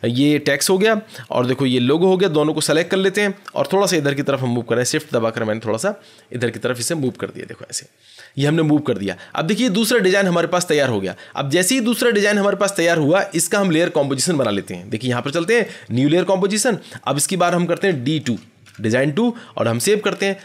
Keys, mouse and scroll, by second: 0.5 click, 2.8 ctrl+click, 4.6-7.4 Right, 7.6 Right, 15.5 click, 17.4 click, 18.2 d, 18.6 d, 19.7 click.